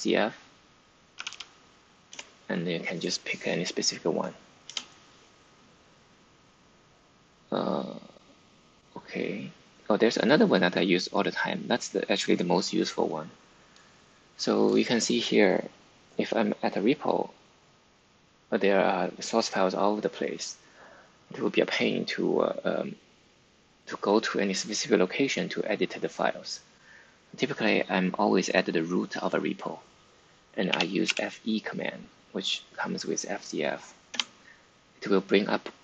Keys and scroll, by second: 1.1 typing, 2.0 Return, 4.6 Return, 30.4-31.5 typing, 34.0 Return.